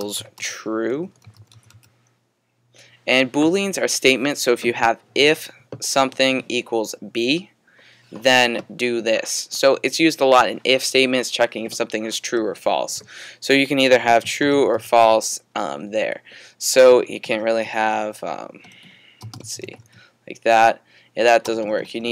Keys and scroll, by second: 0.0-2.2 typing, 3.4-4.2 typing, 13.7-15.5 typing, 18.1 typing, 19.2-20.3 typing.